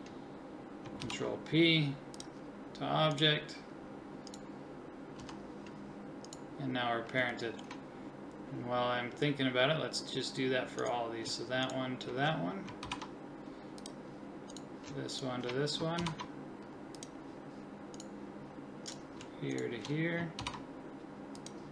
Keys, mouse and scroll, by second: 1.0 ctrl+p, 5.2 g, 10.8-12.8 right drag, 12.8 ctrl+p, 13.6 click, 14.5-16.0 right drag, 16.0 ctrl+p, 16.9 click, 19.2 click, 20.4 ctrl+p.